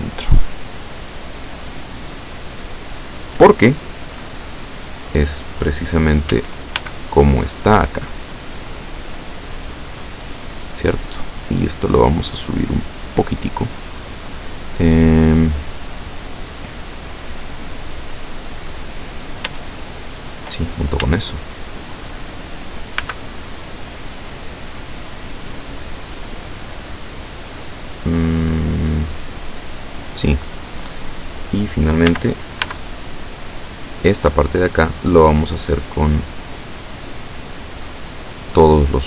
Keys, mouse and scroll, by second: 6.3 a, 6.8 b, 7.1 click, 8.8-10.8 drag, 11.3-13.5 drag, 19.6 shift+right click, 21.1 a, 23.0 b, 23.8 click, 25.0-30.3 drag, 32.1 a, 32.7 b, 33.6 click, 36.1-39.0 drag.